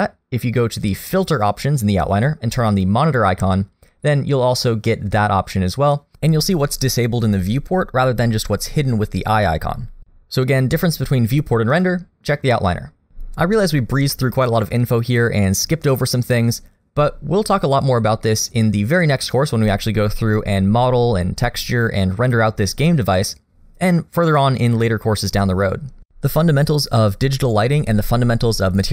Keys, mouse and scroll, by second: 14.6 middle click, 15.3-18.3 scroll up 1, 22.5 middle click.